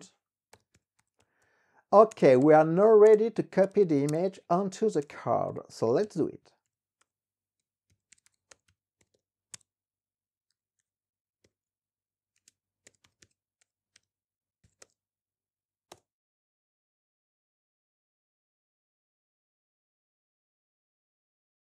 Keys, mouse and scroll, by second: 0.5-4.0 typing, 4.3 Tab, 5.1 Return, 5.2-15.5 typing, 9.7 Tab, 16.1 Return.